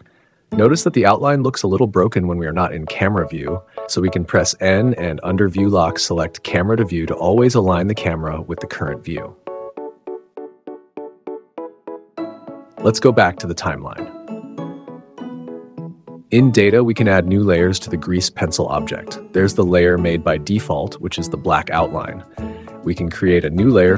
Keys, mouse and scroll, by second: 0.0 n, 1.6 click, 8.0 n, 9.0 =, 10.4 scroll up 1, 12.8 click, 14.9 1, 15.8-16.2 scroll up 1, 17.7-18.9 drag, 20.1 click, 20.8 click, 20.9 middle click, 21.9 middle click, 22.0-23.8 middle drag.